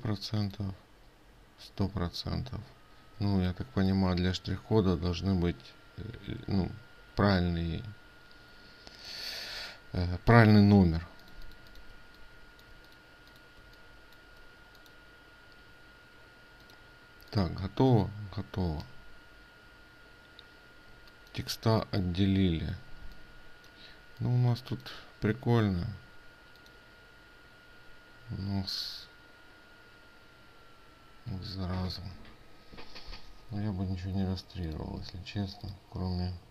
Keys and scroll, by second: 3.8 ctrl+space.